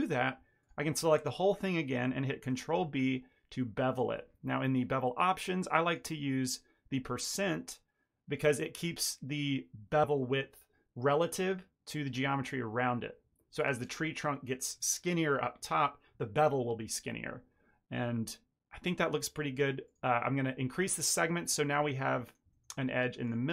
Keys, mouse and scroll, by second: 0.5 click, 1.4 ctrl+click, 2.4 ctrl+b, 5.7 click, 8.2 click, 19.8 click, 21.3 middle click, 21.5 ctrl+middle click, 22.1 middle click, 22.4 shift+middle click, 23.1 click.